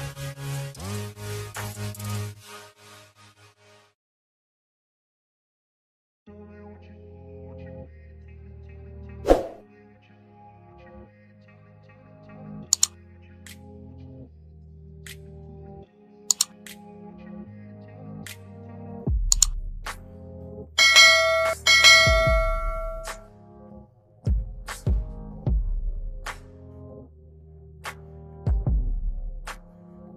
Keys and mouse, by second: 4.6 Escape, 5.4 click, 10.4 click, 11.8 click, 13.2 ctrl+c, 16.7 click, 17.5 ctrl+c, 19.5 ctrl+a, 20.9 ctrl+v, 22.2 ctrl+a, 26.6 click, 28.2 click.